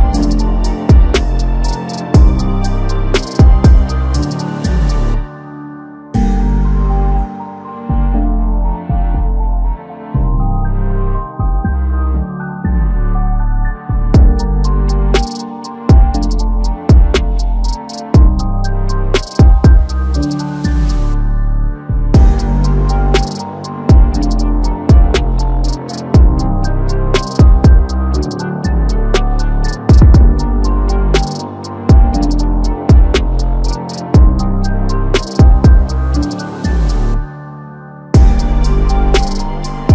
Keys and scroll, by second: 0.2 ctrl+t, 11.0 ctrl+z, 27.0 ctrl+c, 27.5 ctrl+a, 27.7 ctrl+v, 31.3 ctrl+t, 35.6 ctrl+z, 39.6 ctrl+shift+z, 39.7 ctrl+shift+z, 39.8 ctrl+shift+z.